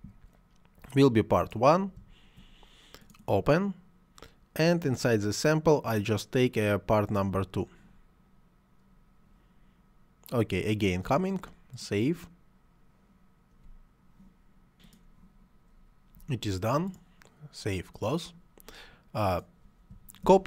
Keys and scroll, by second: 20.2 ctrl+c.